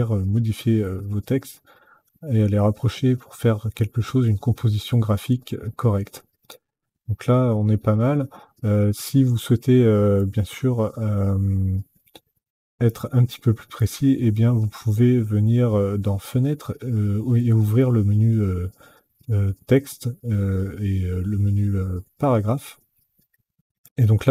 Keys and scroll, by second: 0.6 alt+Left, 1.5 alt+Right, 2.2 alt+Left, 3.7 alt+Right, 4.1 alt+Left, 4.4 alt+Up, 5.0 alt+Down.